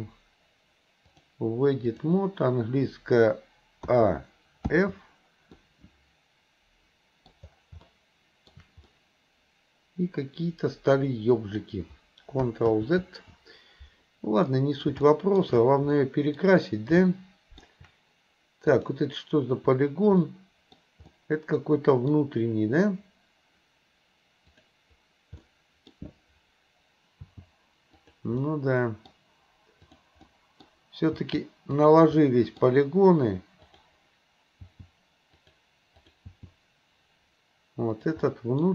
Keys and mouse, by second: 1.2-2.4 drag, 3.8 a, 4.8 f, 5.6-7.3 middle drag, 7.9 shift+middle click, 8.8-11.6 middle drag, 12.7 ctrl+z, 14.5 middle click, 15.1 shift+middle click, 16.0 middle click, 17.0 shift+middle click, 18.8 click, 20.3 middle click, 21.1-22.2 middle drag, 24.5 click, 25.4 middle click, 27.2 g, 28.4 middle click, 30.3 middle click, 31.2 g, 32.3 middle click, 34.7 g, 36.0 click, 36.3 g, 38.3 middle click.